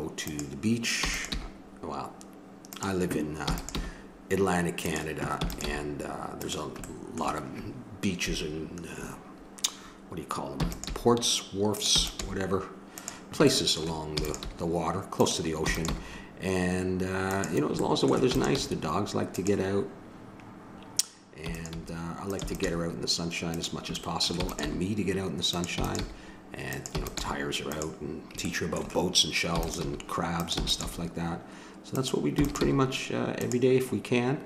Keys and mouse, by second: 1.0 e, 1.3 g, 3.4 e, 3.8 g, 5.4 e, 5.7 g, 8.4 middle click, 10.6 e, 10.9 g, 12.0 e, 12.2 g, 13.5 middle click, 13.8-15.2 drag, 14.2 e, 14.4 g, 15.6 e, 15.9 g, 17.8 middle click, 18.3 e, 18.6 g, 18.9-21.1 middle drag, 21.4 e, 21.8 g, 22.4 e, 22.6 g, 24.4 e, 24.7 g, 25.8 e, 26.0 g, 26.9 e, 27.2 g, 28.5 middle click, 30.0 g, 30.6 e, 30.8 g, 32.3 e, 32.6 g.